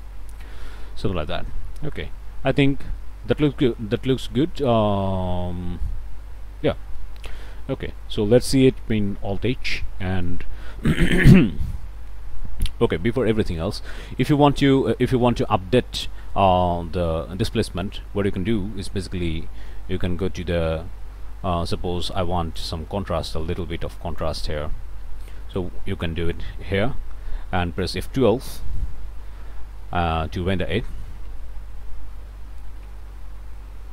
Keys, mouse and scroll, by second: 0.5 middle click, 7.4 scroll up 1, 9.0 alt+h, 9.5 alt+middle click, 10.1 shift+middle click, 13.2 h, 13.6 middle click, 14.1 shift+middle click, 22.6-24.4 drag, 27.6 click, 28.7 F12.